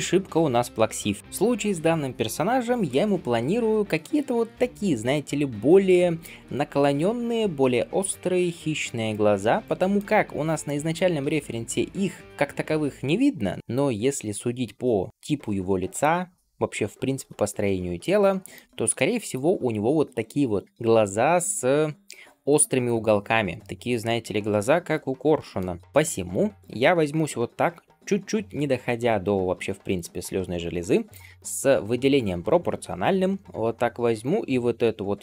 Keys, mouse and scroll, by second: 0.4 shift+middle click, 0.9 scroll down 1, 25.8 scroll down 2, 26.0 middle click, 26.4-26.7 scroll up 1, 27.1-28.6 scroll up 2, 33.4 s.